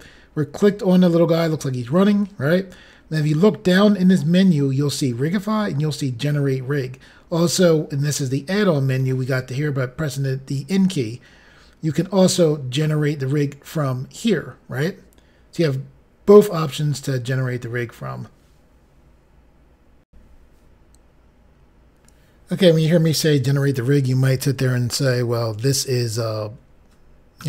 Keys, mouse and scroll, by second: 3.9-5.1 scroll down 1, 5.1 scroll down 1, 20.0 Pause, 21.1 Insert.